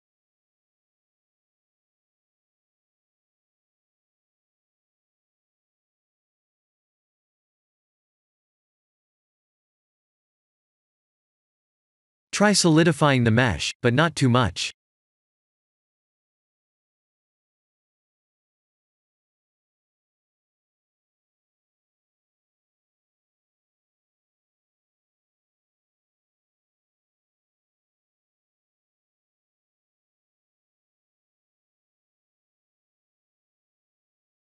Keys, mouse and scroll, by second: 0.4-0.9 scroll down 4, 4.9 click, 5.4 Tab, 5.9 middle click, 11.4 click, 13.9 click, 15.4 middle click, 16.4-16.8 scroll up 2, 16.8 middle click, 17.8 scroll down 2, 21.0 click, 26.1 click, 26.5 middle click, 30.1 click, 30.6 middle click, 32.6 KP_7, 33.4 g, 33.7 y.